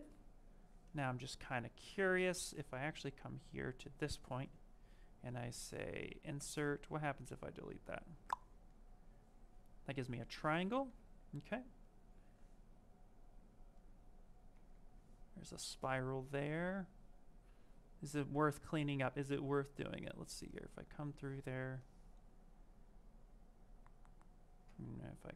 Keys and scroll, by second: 4.1 space, 14.5 z, 24.5 ctrl+z.